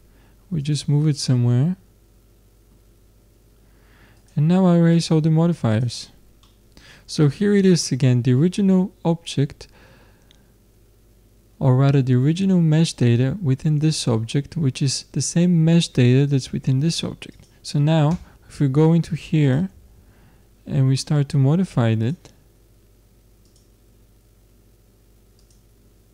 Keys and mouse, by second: 1.2-3.1 middle drag, 4.2-6.4 drag, 6.4-7.8 middle drag, 16.3-19.2 drag, 18.1 Tab, 19.5-20.9 drag, 20.9 middle click, 22.1 middle click, 24.2-26.1 middle drag.